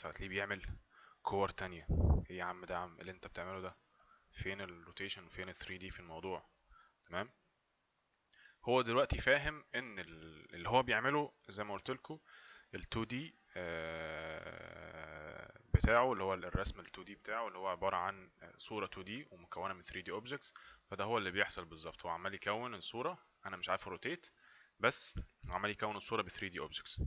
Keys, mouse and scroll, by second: 0.4 click, 20.8 click.